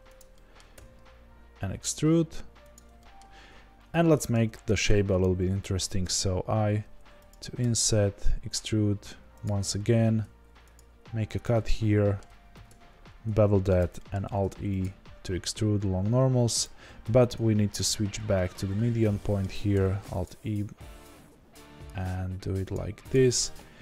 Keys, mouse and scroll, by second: 0.7 e, 3.4-3.9 scroll up 2, 4.3 shift+scroll down 1, 6.0 i, 7.6 e, 9.9 ctrl+r, 12.5 ctrl+b, 14.2 alt+e, 17.0 ctrl+z, 18.7-22.8 middle drag, 18.7 ., 20.2 alt+e, 22.8 3, 23.1 click.